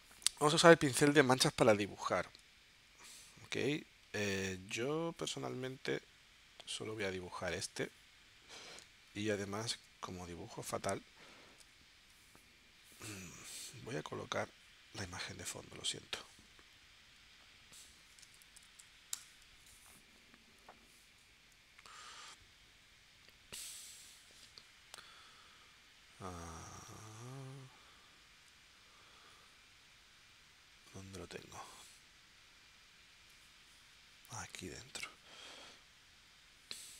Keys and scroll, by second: 1.0 super+Tab, 3.5 z, 4.5 z, 8.8 space.